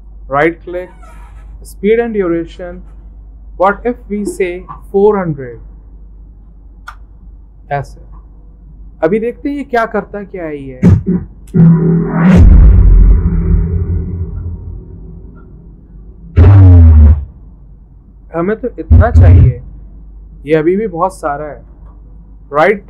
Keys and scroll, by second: 5.0-6.3 typing, 6.8 Return.